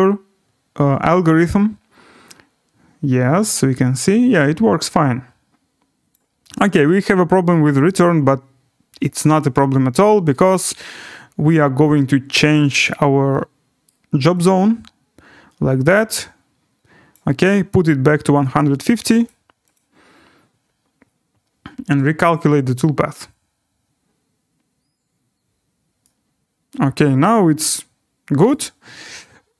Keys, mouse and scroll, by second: 6.1 click, 10.2 click, 12.5 click, 12.9 click, 13.9 right click, 17.1 click, 19.3 click, 19.7 click, 28.5 right click.